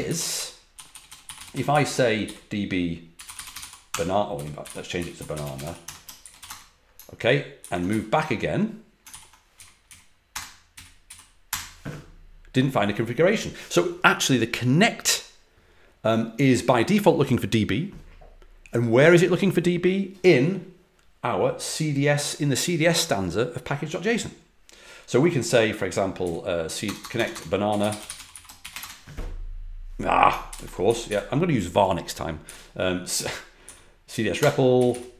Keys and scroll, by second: 0.0 ctrl+a, 0.1-6.3 typing, 6.4 Return, 7.5 ctrl+a, 7.8 l, 9.0 ctrl+l, 9.5 Up, 10.3 Return, 10.7 Up, 11.4 Return, 17.0 typing, 26.8-29.1 typing, 30.4 ctrl+d, 30.8 Up, 31.0 Up, 32.4 Up, 33.1 Up, 33.6 Down, 34.3 Return, 34.7 Up.